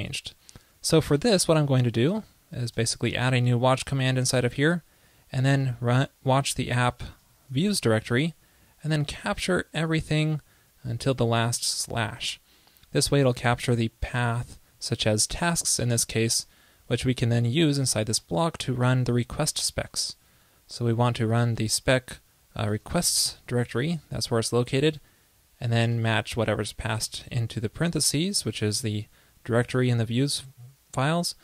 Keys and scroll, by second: 1.7 super+c, 2.9 super+Left, 2.9 super+v.